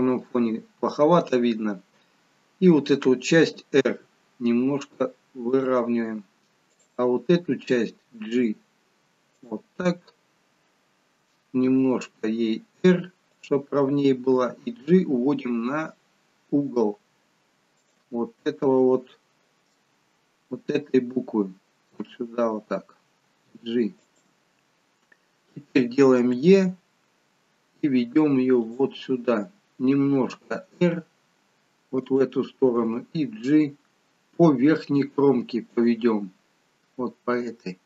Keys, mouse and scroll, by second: 3.8 r, 6.7 click, 8.2 g, 9.7 scroll down 4, 10.8 scroll down 1, 11.7 r, 14.2 g, 19.0 shift+middle click, 19.9 scroll up 4, 22.9 g, 26.3 e, 30.2 r, 32.7 g.